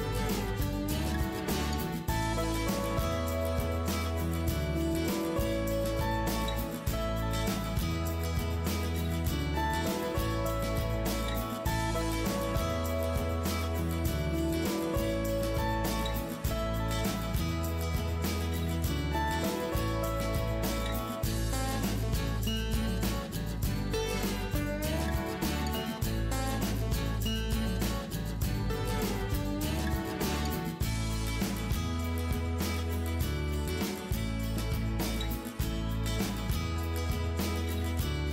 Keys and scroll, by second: 2.1 Return, 6.4 Return, 9.1 ctrl+s, 13.8 Return, 19.5 Return, 26.8 Return, 29.3 ctrl+z, 32.9 ctrl+s.